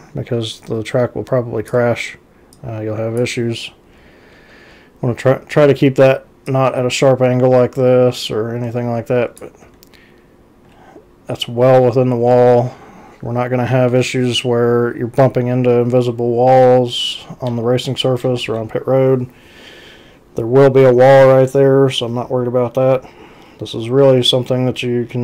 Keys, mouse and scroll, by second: 2.6-3.3 drag, 6.5-9.4 drag, 9.7 x, 16.7 x.